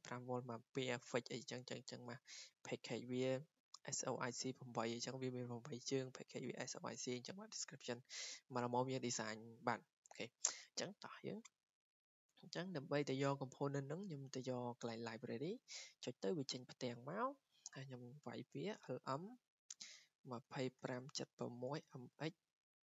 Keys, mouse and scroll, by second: 2.3 click, 2.6 click, 4.6 click, 8.1 click, 11.0 click, 11.1 click, 12.2 click, 14.4 click, 16.9 click, 18.4-22.4 typing.